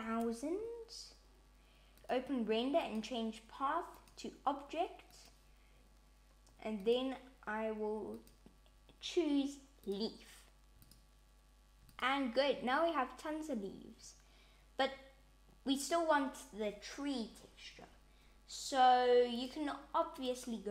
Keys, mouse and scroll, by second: 1.9 click, 2.7 click, 8.0 click, 10.7 click, 19.2 click, 20.1 click.